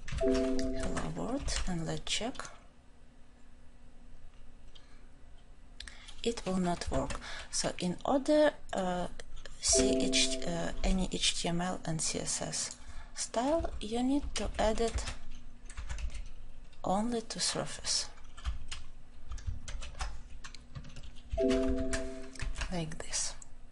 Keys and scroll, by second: 19.6 ctrl+shift+j.